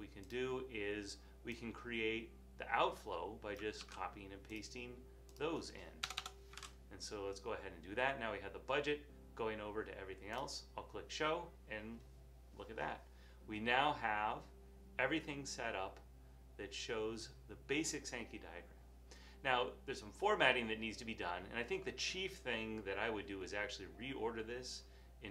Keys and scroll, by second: 0.2 typing, 2.3 typing, 3.9 super+c, 6.7 Return, 6.8 super+v.